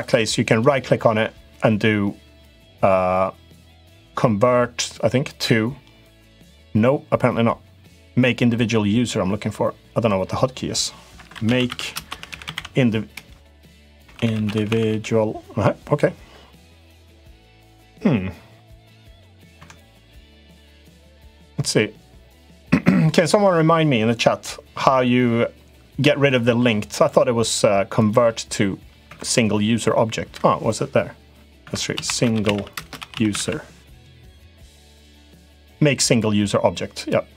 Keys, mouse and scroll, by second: 0.2-9.8 right drag, 10.9 F3, 19.6-26.3 right drag, 26.7-28.9 right drag, 31.4 F3.